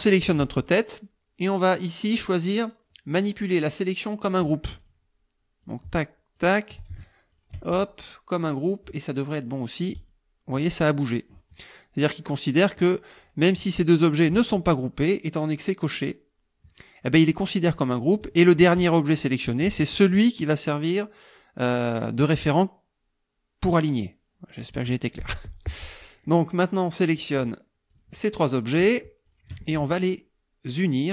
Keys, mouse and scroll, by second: 4.8 click, 5.6 shift+click, 6.4 shift+click, 7.3 shift+click, 8.5 click, 10.0 click, 12.6 click, 13.2 click, 14.1 shift+click, 18.4 shift+click, 25.8 click, 26.9 click, 27.9 shift+click, 29.3 shift+click.